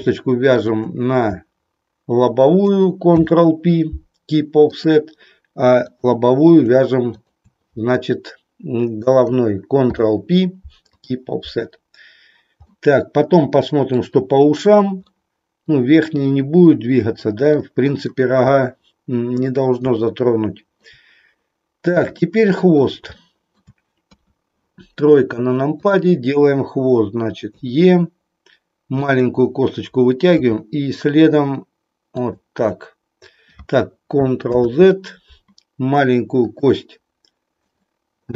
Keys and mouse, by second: 0.4 shift+click, 3.1 ctrl+p, 7.1 shift+click, 9.8 ctrl+p, 12.8-14.1 middle drag, 15.1 middle click, 17.4 middle click, 19.9-20.9 shift+middle drag, 22.1 middle click, 23.3 shift+middle click, 23.9 KP_3, 25.8 click, 27.6 e, 29.1 click, 30.3 e, 34.4 ctrl+z, 36.3 click, 37.6 click.